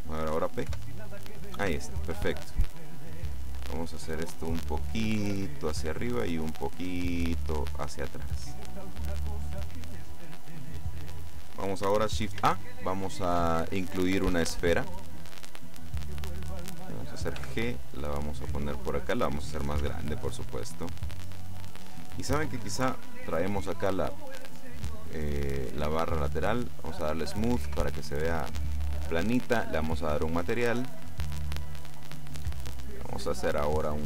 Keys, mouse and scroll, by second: 0.7 p, 1.7 Escape, 2.3-3.1 scroll down 2, 3.3 right click, 4.9-6.4 drag, 6.7-8.4 drag, 8.2 right click, 9.7 middle click, 12.5 shift+a, 15.3 click, 17.5 g, 19.2 click, 19.9 s, 21.6 click, 22.9 t, 26.6 click, 27.7 t, 30.1 click, 30.7 click, 31.8 click, 33.3-34.0 drag.